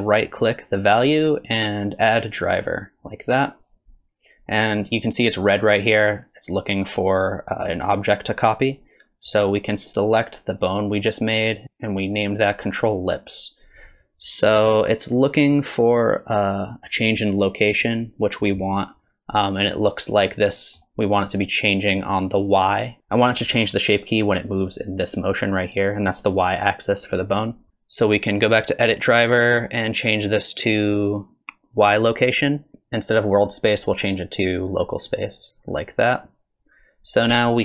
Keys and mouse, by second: 1.0-20.0 drag, 20.3-20.8 middle drag, 27.7-37.0 drag.